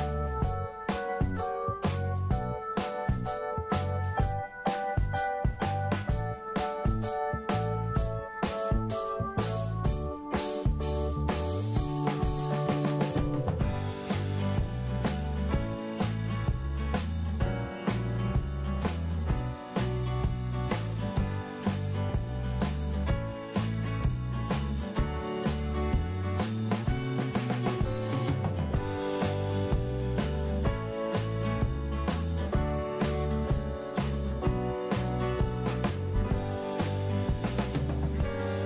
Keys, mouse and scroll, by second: 5.3-6.0 scroll down 1, 6.4-8.0 middle drag, 8.6 click, 10.3-12.0 scroll down 1, 12.0-16.6 drag, 16.6-20.1 middle drag, 20.4 click, 22.5 scroll down 1, 24.0 click, 27.9-28.2 scroll up 1, 29.2-29.6 scroll down 1, 29.9 click, 30.7-35.5 middle drag, 35.5-36.3 scroll up 1, 36.3 middle click, 38.2 scroll up 1.